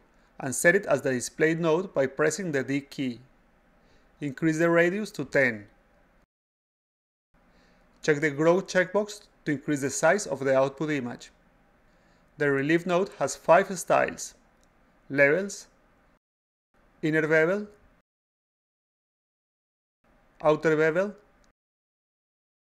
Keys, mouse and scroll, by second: 0.9 click, 5.5 click, 6.0 click, 6.3 click, 6.5 click, 6.9 click, 7.1-8.7 drag, 14.7 click, 15.5 click, 17.4 click, 18.3 click, 20.1 click, 21.1 click.